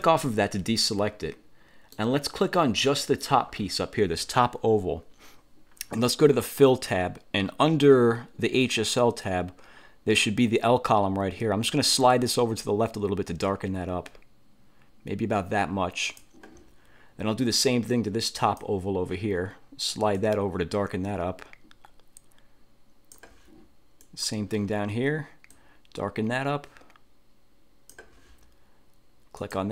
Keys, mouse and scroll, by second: 0.2 click, 0.9-2.2 middle drag, 3.0 click, 12.2-16.5 drag, 18.5 click, 20.2-23.4 drag, 24.1 click, 25.6-28.2 drag, 29.5 click.